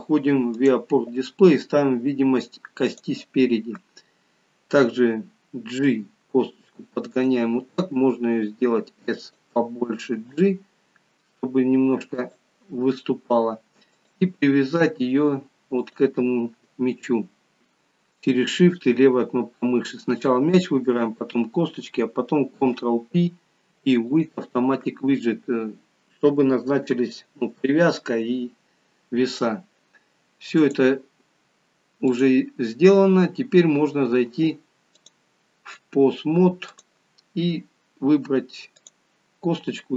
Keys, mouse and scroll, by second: 5.8 g, 7.9 s, 10.1 g, 13.9 click, 15.9 shift+click, 22.5 ctrl+p, 30.5 click, 38.9 click.